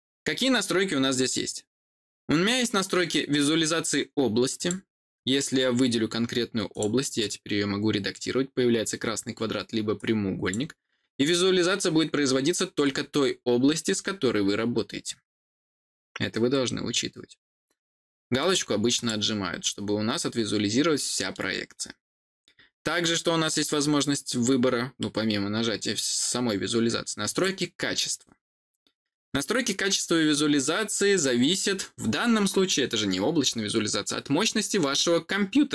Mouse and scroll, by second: 4.5 click, 6.6 click, 7.1 click, 9.9 click, 12.7-13.7 scroll down 2, 13.9-17.4 scroll down 1, 18.3 click, 18.8 click, 19.5-19.8 scroll down 1, 20.9 middle click, 27.2 click.